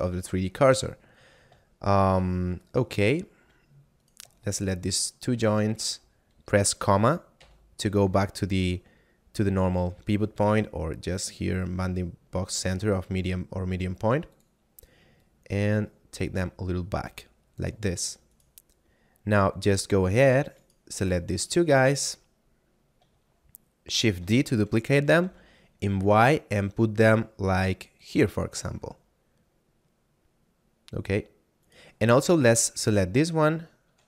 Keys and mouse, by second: 1.7 shift+middle click, 3.1 shift+middle click, 4.0 right click, 4.6 shift+right click, 5.0 shift+middle click, 5.8 middle click, 10.3 click, 14.2 click, 18.1 right click, 20.6 shift+right click, 21.3 middle click, 24.2 shift+d, 25.0 y, 28.0 click, 28.4 middle click, 31.5 right click.